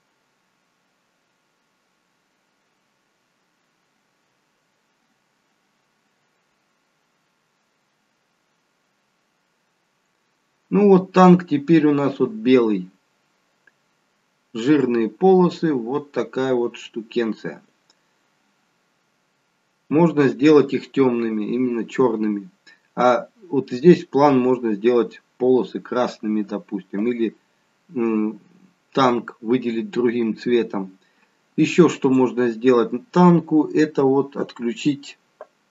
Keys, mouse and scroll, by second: 34.3 scroll up 2.